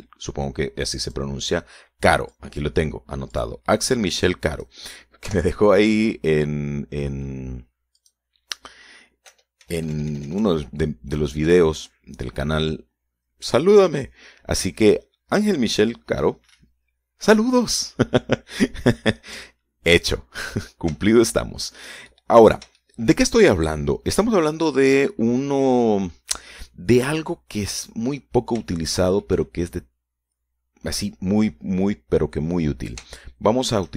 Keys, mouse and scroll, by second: 2.2 click, 3.4 click, 4.5 click, 5.4 click, 6.4 Delete, 9.2 click, 10.4 BackSpace, 20.6 shift+middle click, 21.3-21.9 shift+scroll down 1, 22.3 shift+middle click, 23.5 middle click, 24.0 shift+middle click, 29.4-29.7 scroll down 2, 29.9 shift+middle click.